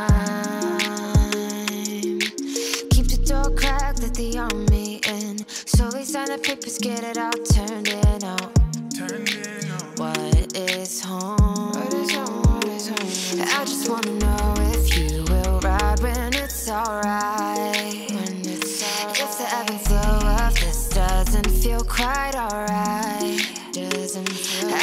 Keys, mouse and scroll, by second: 2.9-4.1 drag, 7.7-12.1 drag, 14.8 click, 15.8-17.4 drag, 17.7 click, 18.5 click, 19.4-19.8 scroll up 1, 19.8 click, 20.1 click, 21.1 click, 22.2-22.7 drag, 22.9 scroll down 2, 23.1-24.0 middle drag, 24.0 shift+a.